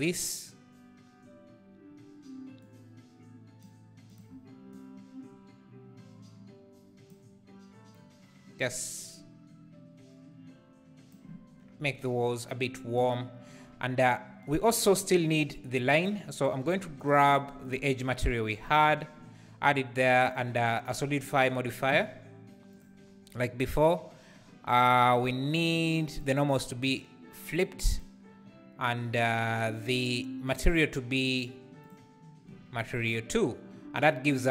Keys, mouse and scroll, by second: 1.0 scroll up 2, 2.7-4.7 drag, 17.1-20.9 drag, 22.8-27.6 drag, 27.9-34.5 drag.